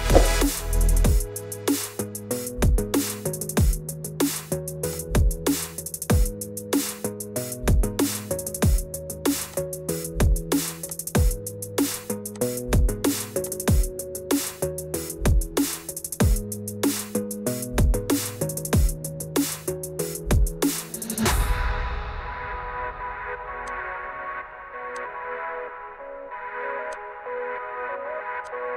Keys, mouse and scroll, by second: 0.0 click, 2.0 click, 10.1 click, 10.9 click, 12.4 click, 15.9 click, 17.0 click, 23.8 click, 25.0 click, 27.0 shift+click, 28.5 shift+middle click.